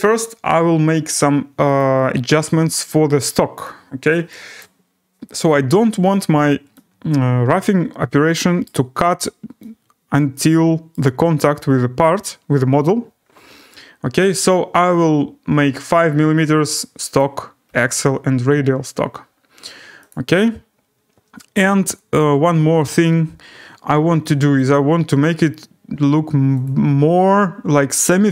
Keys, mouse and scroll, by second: 1.8 click, 2.7 click, 3.6 click, 4.6 click, 5.9-6.8 scroll, 8.6 right click, 9.0 scroll, 10.9 right click, 12.8-13.5 scroll, 15.9 5, 17.2 click, 17.6 5, 20.1 click, 21.0 scroll, 24.1-24.6 scroll, 25.1 right click, 26.6 click.